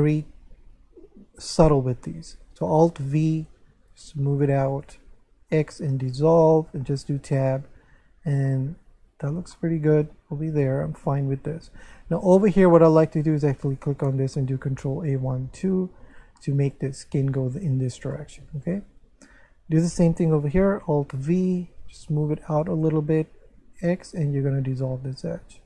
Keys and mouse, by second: 3.2 alt+v, 4.3 click, 4.7 shift+right click, 5.5 x, 5.9 click, 6.8 Tab, 7.4 middle click, 9.5 shift+middle click, 10.7 Tab, 11.0 shift+middle click, 13.2 right click, 13.6 shift+right click, 14.8 ctrl+a, 16.0 Tab, 16.4 middle click, 18.1 shift+middle click, 18.9 Tab, 19.7 right click, 21.1 alt+v, 22.3 click, 22.7 shift+right click, 23.9 x, 24.6 click.